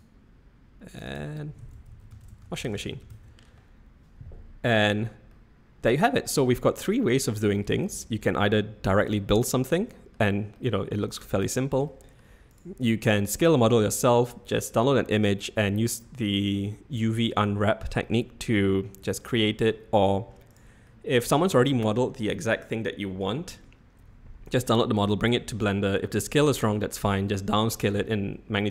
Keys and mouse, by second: 1.0-4.4 drag, 5.3-5.9 middle drag, 6.6-7.2 middle drag, 8.0-8.4 shift+middle drag, 9.0 click, 9.5-10.1 middle drag, 10.5-11.3 middle drag, 11.8-12.2 shift+middle drag, 12.5 click, 13.4-13.8 middle drag, 18.0-18.5 middle drag, 19.2-19.6 middle drag, 20.5 click, 20.8-21.2 middle drag.